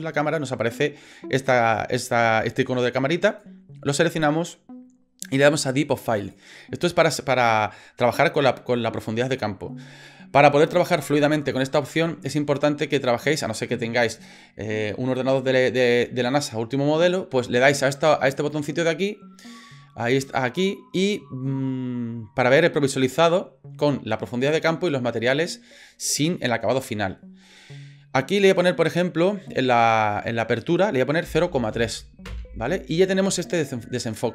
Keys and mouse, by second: 3.3 click, 6.2 click, 18.5 click, 28.5-32.9 drag.